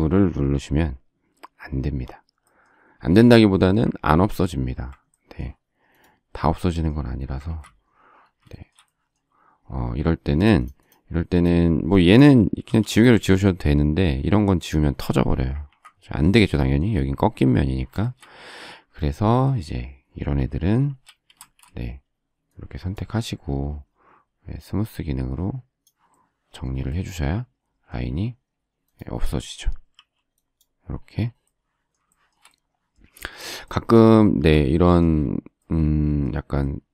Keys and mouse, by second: 4.1 ctrl+f, 7.4 ctrl+z, 12.6 e, 15.6 ctrl+z, 21.3 space, 29.9 e, 34.2 space.